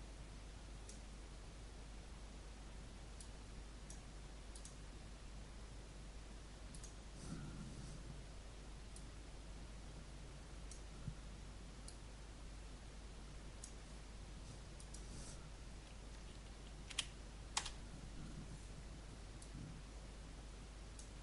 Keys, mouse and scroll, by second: 16.9 shift+d, 17.6 Return, 19.3-21.2 drag.